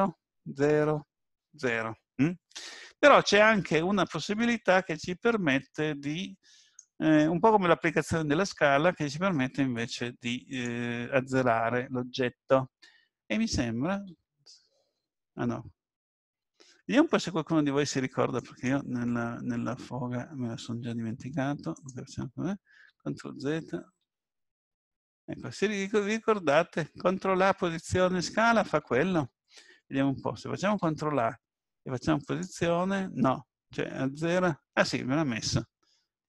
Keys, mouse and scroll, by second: 14.0 ctrl+z, 14.8 ctrl+z, 21.7 click, 22.7 ctrl+z, 23.1 ctrl+z, 23.5 ctrl+z, 24.0 ctrl+z, 25.4 ctrl+z, 30.8 ctrl+a, 34.5-35.1 scroll up 1, 35.1-36.2 scroll down 2.